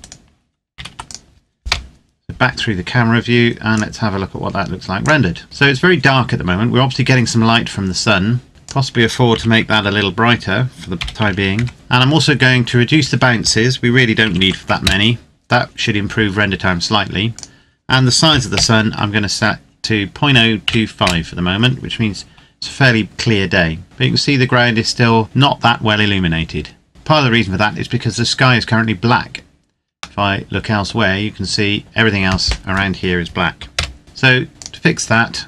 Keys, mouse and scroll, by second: 0.5 ctrl+s, 0.8 click, 1.5 KP_0, 3.5 click, 6.1-8.0 scroll up 1, 8.5 right click, 8.6 click, 9.2 KP_Decimal, 10.8 BackSpace, 11.1 KP_5, 11.6 KP_Enter, 13.3 click, 14.1 KP_5, 14.3 KP_1, 14.4 KP_2, 14.8 KP_Enter, 18.2 KP_Decimal, 18.4 KP_0, 20.0 KP_2, 20.4 KP_5, 21.0 KP_Enter, 23.7-25.2 scroll up 1, 27.2-28.8 scroll down 1, 29.5-30.1 scroll down 1, 30.1 middle click, 30.9 scroll down 1, 33.8 KP_0, 34.5 click.